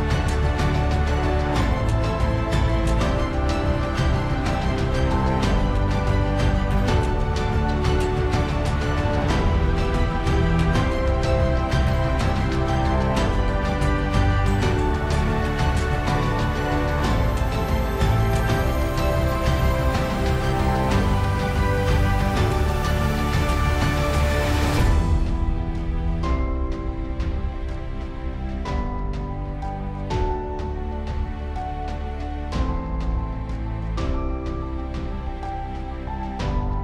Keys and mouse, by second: 23.9 middle click, 31.9 ctrl+z, 36.3 middle click.